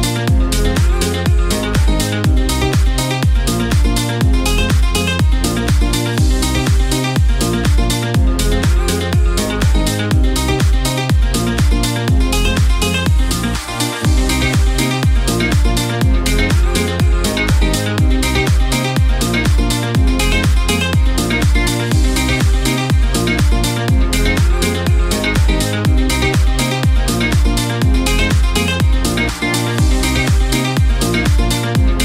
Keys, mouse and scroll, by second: 25.9 space, 29.0 F9.